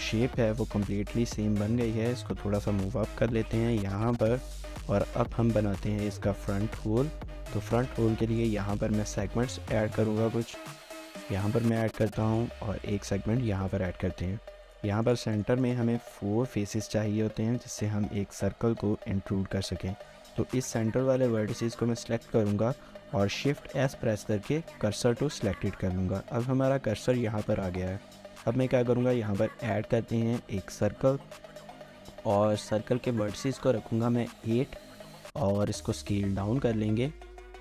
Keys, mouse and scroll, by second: 1.9 typing, 3.6 typing, 4.0 shift+middle click, 5.4 shift+middle click, 6.1 scroll up 1, 6.6 shift+middle click, 8.0 ctrl+r, 11.9 ctrl+r, 12.8 right click, 13.3 scroll up 1, 13.6 shift+middle click, 14.5 3, 15.1 shift+click, 21.9 1, 23.4-24.3 typing, 27.4-28.2 typing, 27.5 scroll down 1, 29.3-30.0 typing, 32.1 typing, 34.0 typing, 34.3 Return, 35.5-36.3 typing.